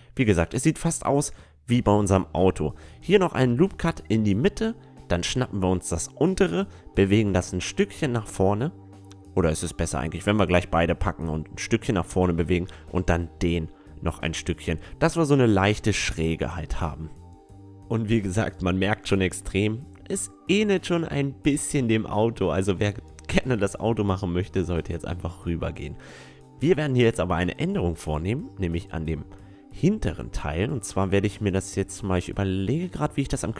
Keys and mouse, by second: 1.6-3.5 drag, 2.5-4.3 right drag, 4.3-5.9 drag, 8.1-9.9 right drag, 8.8-10.4 drag, 11.9-13.7 right drag, 12.7-14.6 drag, 14.8 Tab, 14.9-17.1 middle drag, 18.8-21.9 middle drag, 23.6 Tab, 25.0-26.9 drag, 25.6-26.9 right drag, 27.1 click, 27.1 right click, 27.5 middle click, 27.6-29.5 drag, 28.4-30.8 right drag, 29.5 s.